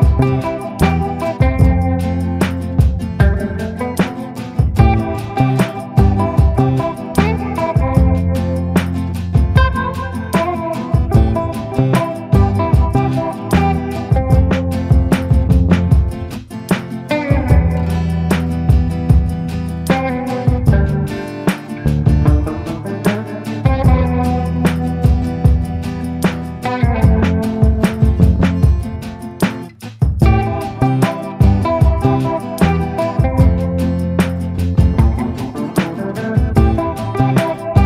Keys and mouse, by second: 0.4 middle click, 1.3 shift+middle click, 1.5 middle click, 2.4 shift+middle click, 10.4 click, 11.1 ctrl+z, 12.8 shift+middle click, 13.1-14.7 middle drag, 15.8 click, 16.7 click, 17.6-18.9 drag, 20.4 ctrl+i, 21.0 b, 21.8 b, 23.0-25.7 typing, 29.0-30.3 drag, 30.6-31.1 ], 31.1-33.2 drag, 33.6 a, 35.0 middle click, 36.1 middle click, 36.2 middle click, 36.8 shift+middle click, 37.0 middle click.